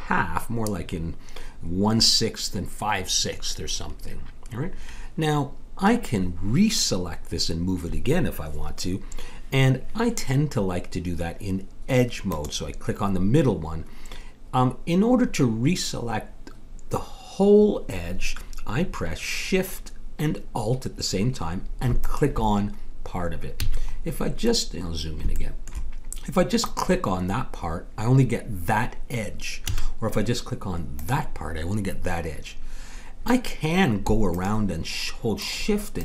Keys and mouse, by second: 12.2-22.0 drag, 22.0-23.6 right drag, 23.6 click, 23.6 a, 26.7-28.4 drag, 26.7 right click, 29.7 a, 30.9-32.7 drag, 34.3-36.0 drag.